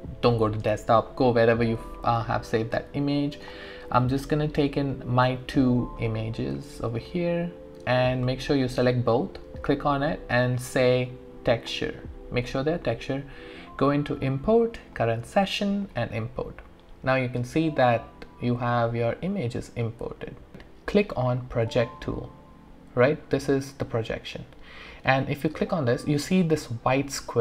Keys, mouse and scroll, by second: 1.8-3.4 scroll down 1, 3.4 click, 11.6 click, 13.8 click, 20.0 click, 20.2 alt+middle click, 24.0 click, 24.0 typing.